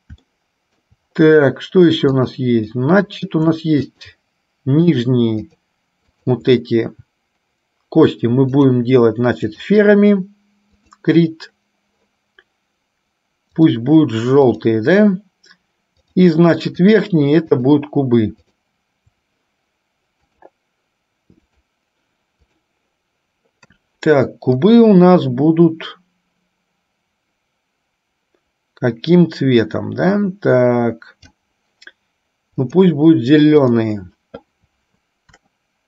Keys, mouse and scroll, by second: 0.3 shift+middle click, 2.2 click, 3.0 middle click, 4.1 shift+click, 5.1 shift+click, 6.3 shift+click, 8.7-9.8 drag, 14.7 click, 16.1 click, 17.0 shift+click, 17.6 shift+click, 18.6 shift+click, 20.5-21.8 drag, 22.7 click, 24.7-31.6 drag, 35.3 KP_1.